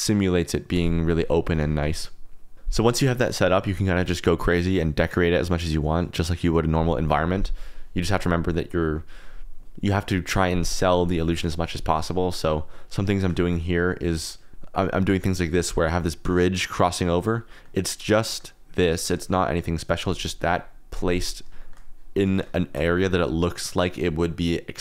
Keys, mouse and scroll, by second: 1.3 click, 1.7 r, 1.8 z, 13.4 shift+click, 14.8 click, 15.5 click, 17.5 click, 17.9 KP_Decimal, 18.2 drag, 19.1 click, 19.2-19.6 middle drag, 21.6 shift+click, 22.6 shift+click.